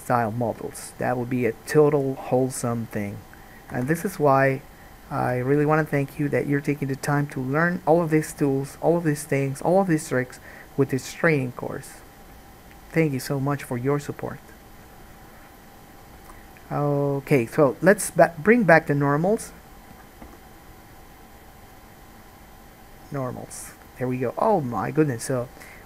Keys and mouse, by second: 3.9 Tab, 5.4 click, 5.4 middle click, 5.4-16.3 right drag, 5.4 1, 16.3-18.8 alt+drag, 16.5 alt+a, 18.8 middle click, 19.0-21.8 drag, 20.4 n, 21.8-25.8 middle drag.